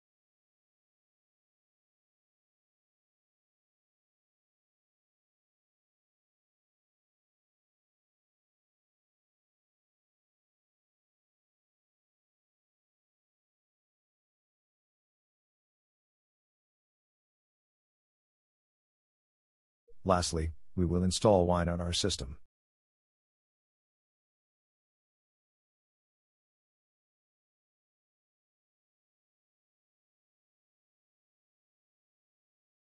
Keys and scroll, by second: 8.7 Return.